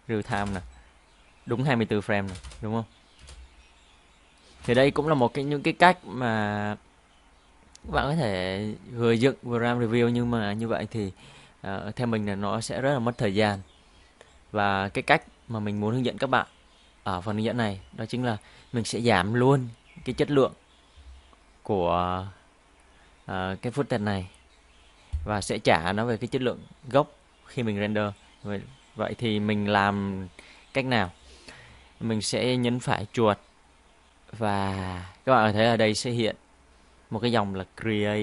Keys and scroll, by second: 2.4 space, 3.2 space, 4.7 space.